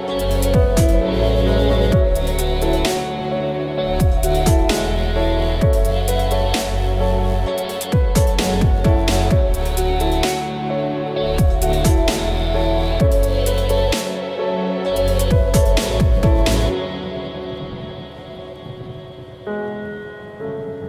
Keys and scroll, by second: 16.2 F6, 17.4 Escape, 20.8 alt+F9.